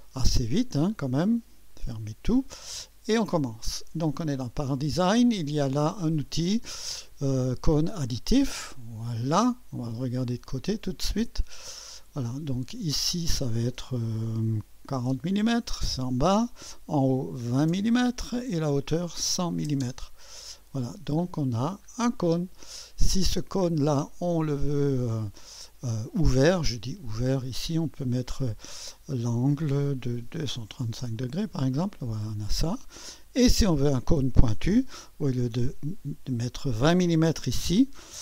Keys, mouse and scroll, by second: 1.7 click, 3.3 click, 6.1 click, 8.1 click, 9.8-11.4 drag, 11.6-11.9 scroll up 1, 12.7 click, 14.8 4, 15.1 0, 16.4 click, 17.3-20.7 typing, 18.4 click, 20.6 click, 21.2-22.1 scroll down 1, 22.1-23.4 drag, 22.5 typing, 23.5-25.5 drag, 26.8-27.9 drag, 30.0-30.7 typing, 31.0 Return, 31.6-33.4 drag, 32.7-33.4 typing, 33.6 drag, 35.2 click.